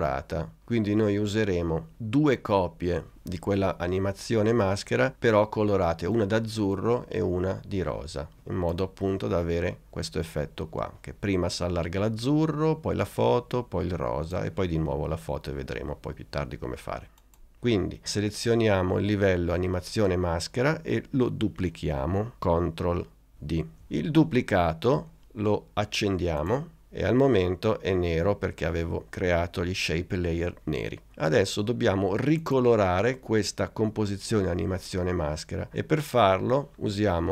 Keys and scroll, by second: 23.3 super+d.